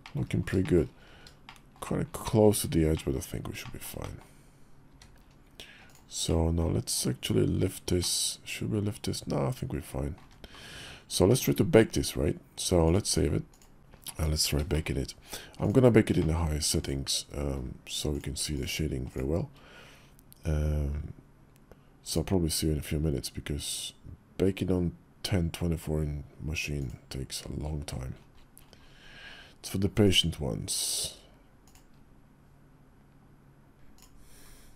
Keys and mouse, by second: 0.3 shift+middle click, 0.8 middle drag, 1.2 shift+middle drag, 2.7 middle click, 3.4 shift+middle drag, 3.8 middle click, 6.1-6.4 middle drag, 7.0 KP_5, 7.8-9.9 middle drag, 11.0 shift+middle click, 12.6-13.4 drag, 14.5 shift+click, 14.7 KP_5, 15.9 shift+click, 17.9 click, 21.8 click, 29.8 click, 30.4 click.